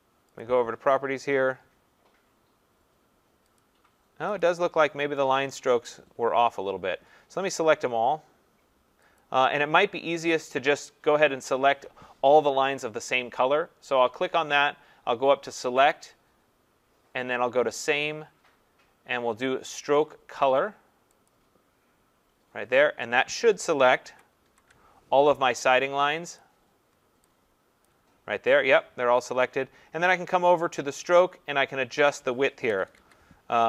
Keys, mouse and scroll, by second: 0.4 click, 3.6 click, 4.4 click, 5.8-8.2 scroll, 8.2-9.2 scroll, 9.2 click, 12.7 click, 15.8 click, 21.3 click, 22.1-23.0 scroll, 23.0 middle click, 24.1 ctrl+-, 24.1 middle click, 24.4 ctrl+-, 26.1-26.9 scroll, 26.4 click, 27.9 click, 31.2 click, 32.5-33.5 typing.